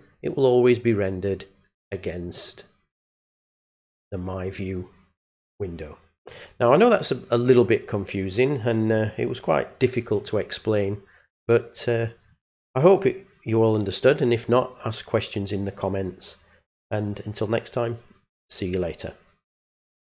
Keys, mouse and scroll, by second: 2.2 click, 3.6 click, 20.0 click.